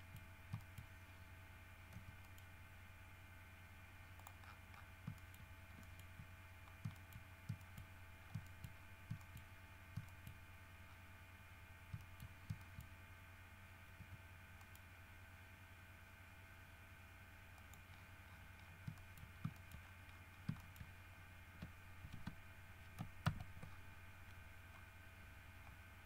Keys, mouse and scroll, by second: 0.1 shift+middle click, 0.7 shift+middle click, 2.1 g, 2.4 middle click, 4.3 middle click, 4.6-5.2 scroll down 4, 5.3 shift+middle click, 6.0 shift+middle click, 6.5-7.1 shift+scroll down 2, 7.1 shift+middle click, 7.5-8.3 shift+scroll up 2, 7.8 shift+middle click, 8.4 shift+scroll down 1, 8.6 shift+middle click, 8.9 shift+scroll up 1, 9.3 shift+middle click, 10.2 shift+middle click, 10.9 shift+middle click, 10.9 scroll up 2, 11.0-11.3 scroll down 2, 11.6 scroll up 2, 12.1 shift+middle click, 12.4 shift+scroll up 2, 12.8 shift+middle click, 14.1 g, 14.8 middle click, 17.7 middle click, 18.1-19.0 scroll down 5, 19.1 shift+middle click, 19.7 shift+middle click, 19.9-20.7 shift+scroll up 4, 20.7 shift+middle click, 22.2 alt+r, 22.8 alt+scroll down 2, 23.4 ctrl+z, 23.9-24.9 ctrl+scroll down 7, 24.9 scroll up 2, 25.8-26.0 scroll up 2.